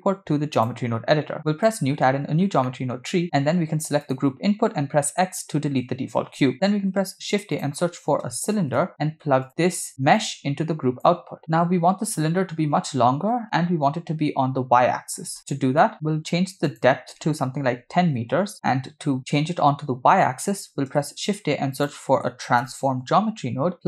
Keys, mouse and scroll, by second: 1.6 click, 2.6 middle click, 3.1-4.0 scroll up 6, 4.0 click, 5.1 x, 6.8 shift+a, 10.1-11.0 drag, 15.3-15.8 scroll up 2, 15.8 middle click, 16.7-18.2 drag, 21.0 shift+a.